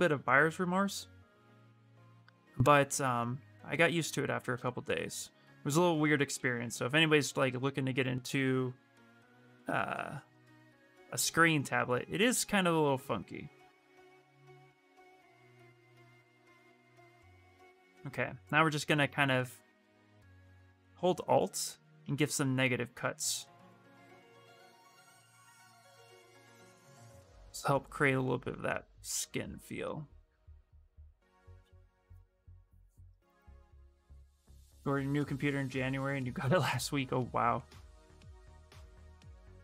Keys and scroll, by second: 6.1 ctrl+z, 11.5 ctrl+z, 12.0 space, 21.8 s, 36.5 s.